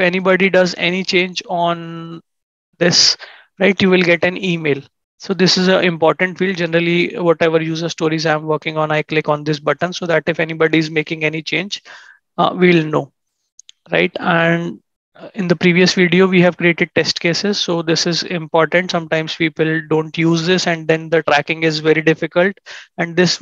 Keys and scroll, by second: 0.7 ctrl+shift+&, 2.2 ctrl+shift+@.